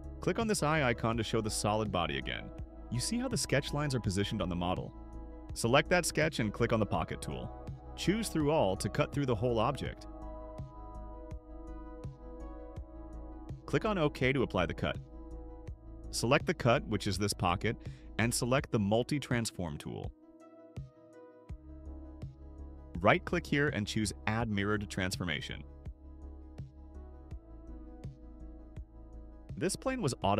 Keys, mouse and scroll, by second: 1.8 click, 2.7 click, 3.1 click, 4.0 middle click, 4.0 scroll, 4.5 middle click, 5.5 click, 6.5 click, 7.8 click, 8.4 click, 9.9-13.2 drag, 14.2 click, 16.6 click, 20.8 click, 23.5 right click, 27.6 click, 28.8 middle click, 28.8 scroll down 3, 28.9 middle click.